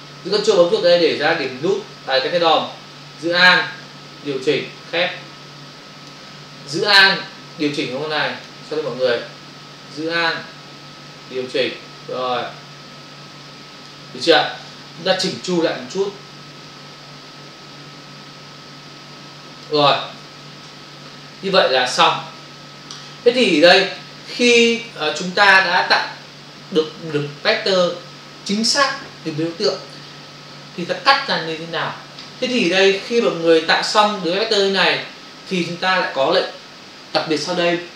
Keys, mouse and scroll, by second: 1.3 ctrl+click, 1.5 ctrl+click, 3.8 alt+click, 7.5 alt+click, 9.0 ctrl+z, 11.1 alt+click, 16.7 ctrl+click, 20.8 ctrl+o, 22.5 ctrl+click, 23.2 click, 33.2 f, 34.7 ctrl+-.